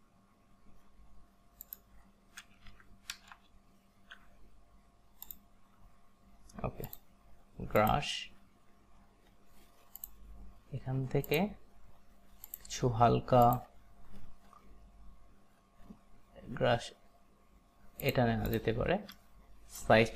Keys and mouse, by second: 1.7 click, 2.8 Right, 3.2 BackSpace, 5.3 click, 6.9 click, 7.8 click, 10.0 click, 11.3 click, 12.5 click, 13.5 click, 18.1 click, 18.6 click, 19.3 alt+right click.